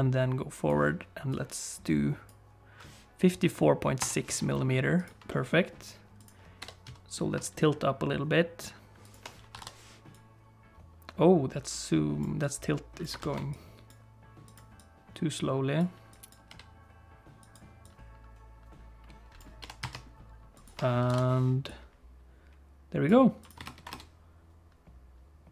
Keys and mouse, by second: 1.4-2.4 drag, 4.5 middle click, 5.3 middle click, 6.2 click, 6.6 g, 9.5 i, 10.2-12.3 drag, 12.4 click, 13.2 ctrl+z, 13.5 click, 14.5 click, 14.8-15.9 drag, 16.1 click, 16.5 g, 17.9-19.5 drag, 19.6 g, 21.0 i, 21.7-23.1 drag, 23.4 click.